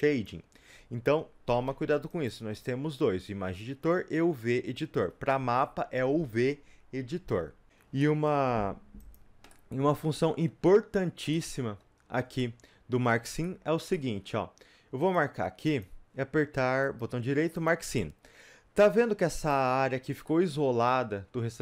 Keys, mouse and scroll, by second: 0.0 click, 8.0 middle click, 8.3 Tab, 9.1-11.2 middle drag, 9.1 click, 11.2 scroll up 2, 11.3-15.0 middle drag, 15.0 click, 17.7 middle click, 17.7 right click, 17.9 scroll up 2, 19.5-21.6 middle drag, 19.5 click.